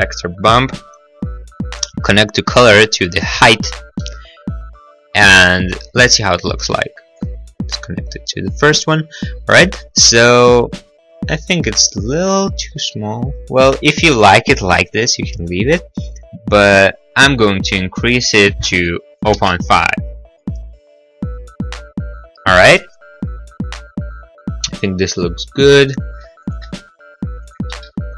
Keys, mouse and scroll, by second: 0.2 click, 4.0 middle click, 4.1 middle click, 4.7 middle click, 5.2 click, 5.3 middle click, 5.4 click, 5.5 middle click, 5.8 click, 7.2 click, 11.7 click, 19.3 0, 19.3 ., 19.3 5, 19.6 Return, 20.5 click, 22.5 click, 22.5 click, 22.6 click, 22.7 click, 22.8 click, 26.6 click, 26.6 0, 26.7 Return, 27.4 click, 27.6 click, 27.6 0, 27.7 ., 28.0 Return, 28.0 5.